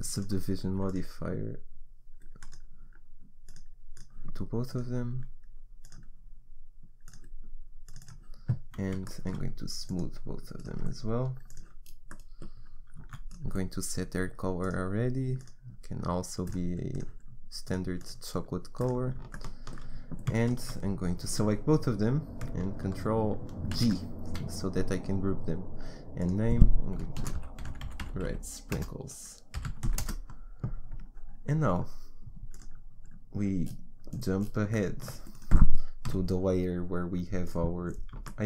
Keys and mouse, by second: 4.7-5.7 right drag, 5.8-7.1 right drag, 9.0-11.0 drag, 10.6-16.4 right drag, 13.3-14.6 drag, 16.9 right click, 17.6-20.0 right drag, 20.0 middle click, 20.5 right click, 23.8 ctrl+g, 26.2-27.3 drag, 35.4 middle click, 36.1 KP_1.